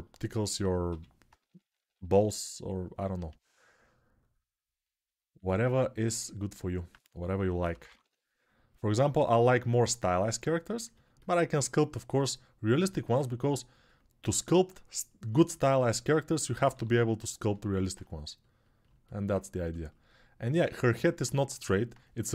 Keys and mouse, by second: 0.6-1.9 typing, 7.1 6, 7.5 ], 7.6 ], 7.8 ], 10.7-15.0 alt+drag, 15.0-19.1 alt+right drag, 16.5 g, 19.3-22.3 ctrl+alt+shift+drag.